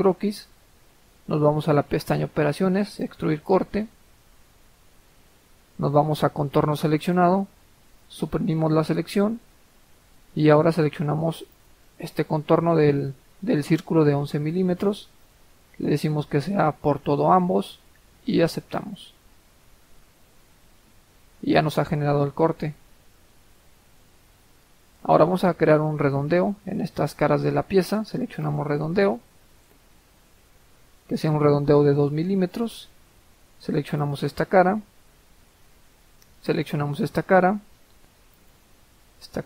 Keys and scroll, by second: 8.9 Delete, 31.9 2.